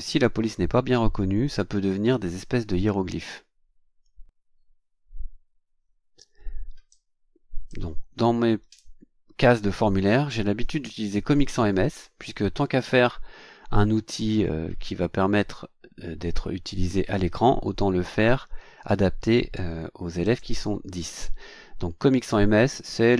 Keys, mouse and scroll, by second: 6.9-7.9 drag, 10.1-11.7 typing, 20.2 click.